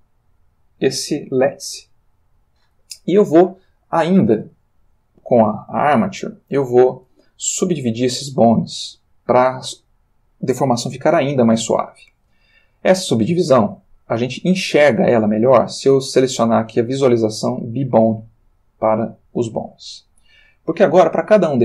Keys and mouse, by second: 2.2 click, 5.1-5.6 drag, 13.7 click, 17.4 click.